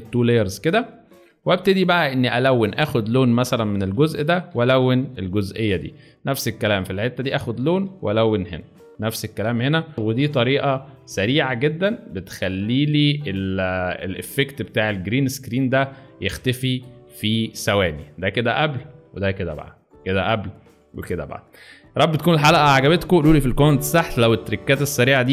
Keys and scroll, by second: 0.0 space, 1.2 alt+space, 5.1 space, 6.0 alt+space, 8.4 alt+space, 12.2 space, 16.2 alt+space, 16.8 alt+space.